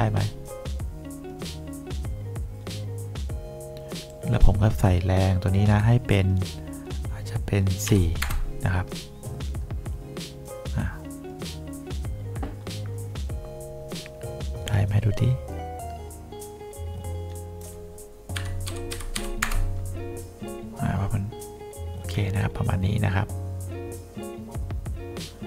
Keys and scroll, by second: 8.0 4, 8.3 Return, 18.5 KP_Subtract, 18.8 2, 19.3 5, 19.6 Return.